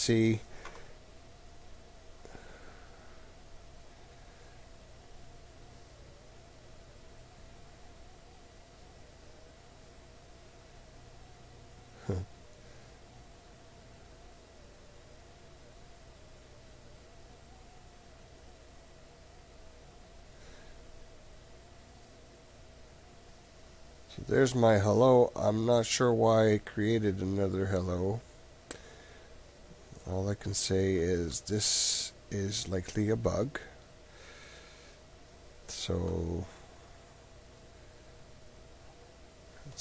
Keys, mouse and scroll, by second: 4.1 click, 7.2 click, 9.2 click, 11.4 click, 11.8 click, 12.6-14.7 drag, 15.6 click, 20.4 middle click, 21.0-26.1 middle drag, 26.7-28.3 middle drag, 29.4-30.9 middle drag, 39.7 click.